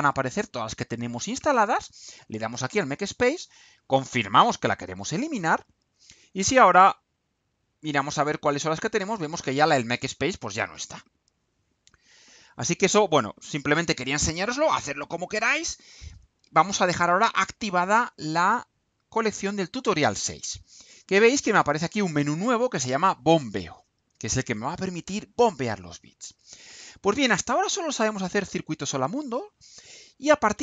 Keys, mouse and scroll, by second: 2.7 click, 4.8 click.